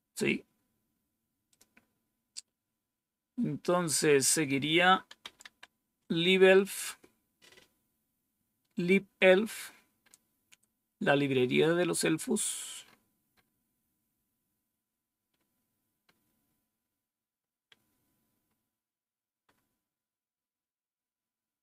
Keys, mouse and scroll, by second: 1.4 click, 2.2 typing, 4.9-5.9 typing, 17.1-17.9 scroll down 2, 18.4-20.1 scroll down 4, 20.7-21.6 scroll down 2.